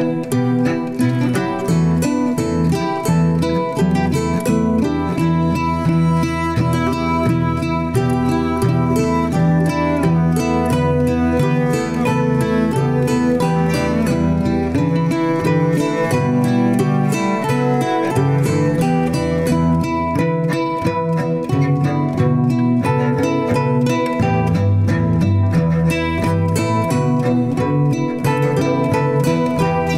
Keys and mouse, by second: 5.4 click, 6.3 click, 8.7 click, 9.4 click, 10.6-17.0 drag, 13.2 Left, 14.5 Delete, 16.0 l, 21.2 click, 26.0-27.3 drag, 27.3-28.1 middle drag, 28.8-29.3 middle drag.